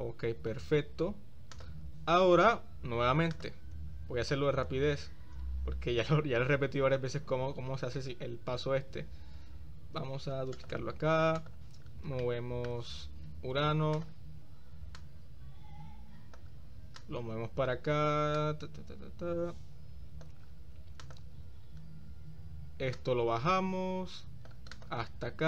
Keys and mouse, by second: 1.6 click, 3.5 click, 4.1 shift+s, 6.0 shift+d, 7.3-8.6 drag, 8.2 s, 11.6 click, 12.3-12.8 shift+middle drag, 14.1 shift+click, 15.1-16.6 drag, 17.2 click, 18.5-20.4 drag, 21.2 click, 23.1 click, 23.9 right click, 24.8-25.2 right drag.